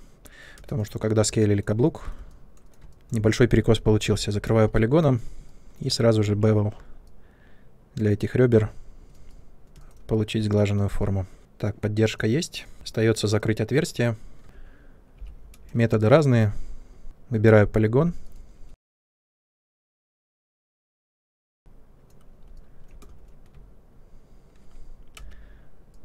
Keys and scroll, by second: 0.5 space, 2.6 2, 6.2 b, 9.7 space, 12.7 Tab, 15.1 p, 17.9 3, 23.0 space, 25.1 c.